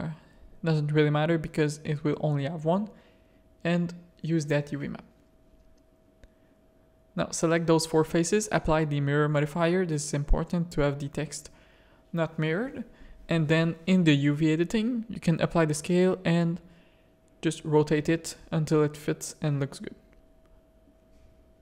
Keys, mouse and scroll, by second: 2.7 Tab, 3.6 Tab, 5.0 ctrl+a, 5.5 Tab, 5.9 click, 6.1 3, 8.0 z, 9.1 click, 12.6 click, 14.2 a, 15.0 r, 17.3 click, 18.1 click, 19.2 shift+middle click, 20.7 g.